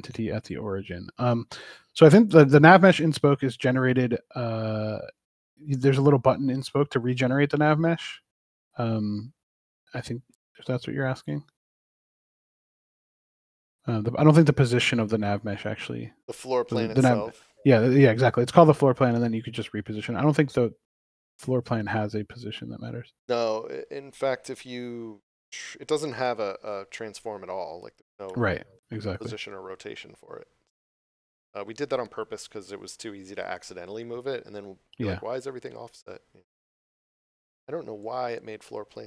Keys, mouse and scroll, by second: 1.2 shift+click, 3.8 click, 6.3 shift+click, 12.4 click, 19.4 click, 26.9 scroll up 1, 38.0 click.